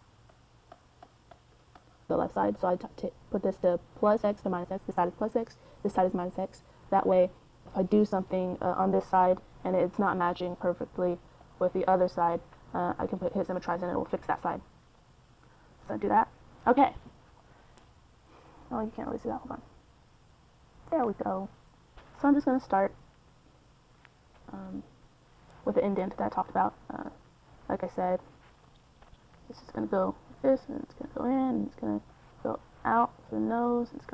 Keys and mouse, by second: 0.0 middle click, 1.0-3.5 drag, 4.2-7.3 drag, 7.3-10.2 middle drag, 11.0 f, 11.8 middle click, 12.7-15.8 middle drag, 15.8 click, 16.0 middle click, 16.3-19.0 drag, 19.0 middle click, 19.2-21.7 drag, 21.7-27.9 middle drag, 31.6-33.0 middle drag.